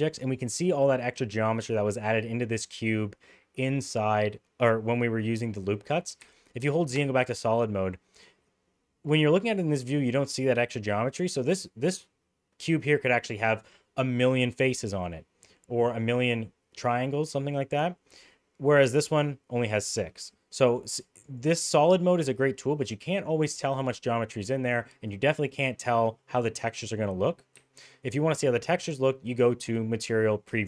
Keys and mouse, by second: 6.3 z, 20.7 click, 21.0 click, 21.4 click, 27.6 z.